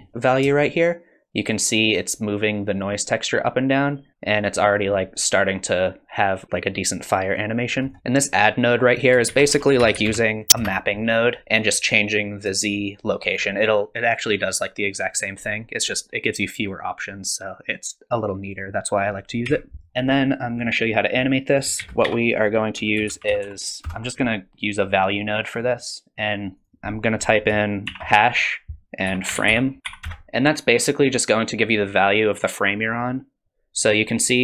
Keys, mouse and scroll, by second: 0.6 shift+click, 9.0 click, 9.3 shift+a, 12.6 shift+click, 18.4 click, 19.5 x, 19.9 middle click, 19.9-20.3 scroll down 3, 21.5 click, 21.8 shift+a, 26.6 click.